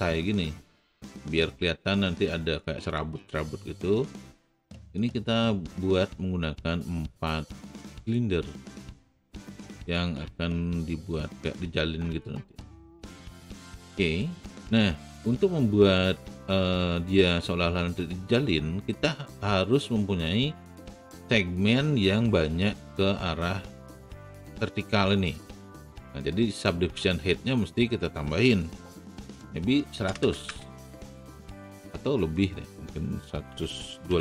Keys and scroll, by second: 29.3 KP_1, 30.0 KP_0, 30.2 KP_0, 30.4 Return, 33.5 KP_1, 34.0 KP_2.